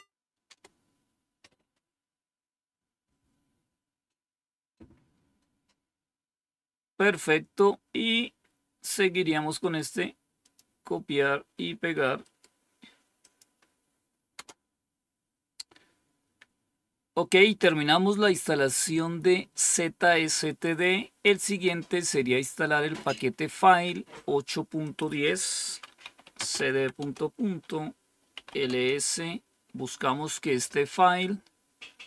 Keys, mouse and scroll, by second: 0.4 Return, 5.8-6.9 scroll down 2, 6.9-8.8 drag, 9.5 right click, 10.4 click, 13.1 click, 14.3 Return, 21.3 click, 24.8 click, 25.9-28.8 typing, 30.6-31.4 typing, 30.9-32.0 scroll up 1.